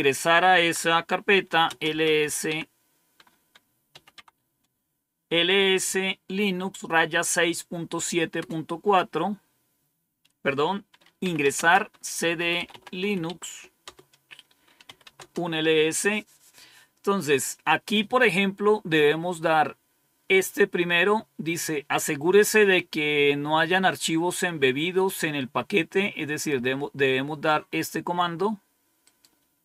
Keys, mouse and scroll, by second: 0.2-2.6 typing, 3.8-5.2 typing, 8.3 Return, 10.9-13.4 typing, 13.7 Return, 14.5-15.3 typing, 26.3-27.4 drag, 28.9 right click.